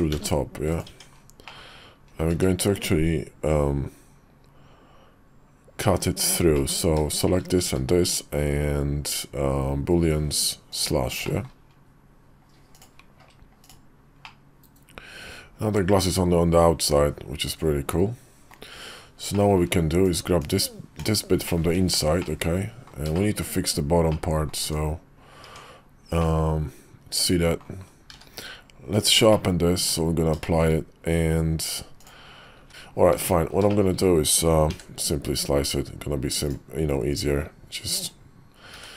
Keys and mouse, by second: 0.8 Tab, 1.4 middle click, 2.2 q, 6.5 middle click, 7.0 shift+click, 7.6 q, 11.2 middle drag, 12.7-14.2 drag, 14.2-18.4 middle drag, 19.3 middle click, 20.0-20.3 drag, 20.3 /, 20.9 /, 21.4 middle click, 21.6 `, 22.1-22.8 middle drag, 23.1 shift+middle click, 24.0 middle click, 24.5 Tab, 25.4 Tab, 26.1-27.5 middle drag, 28.0 q, 29.3 middle click, 29.7 Tab, 30.3 shift+middle click, 31.9 click, 32.5 `, 33.1 Tab, 33.6 shift+middle click, 34.6 d, 37.2-38.0 drag, 38.7 q.